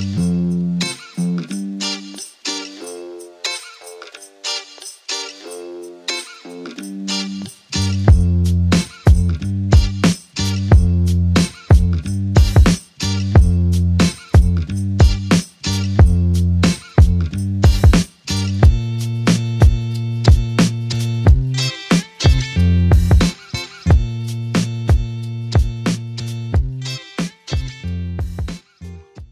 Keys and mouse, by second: 1.4 alt+click, 2.7 f, 3.9 alt+click, 5.3 alt+click, 5.7 ctrl+click, 8.5 alt+click, 9.4 ctrl+click, 16.5 alt+click, 17.2 ctrl+click, 18.4 ctrl+click, 21.2 ctrl+click, 23.6 alt+click, 24.6 alt+click, 24.7 ctrl+alt+click, 25.4 alt+click.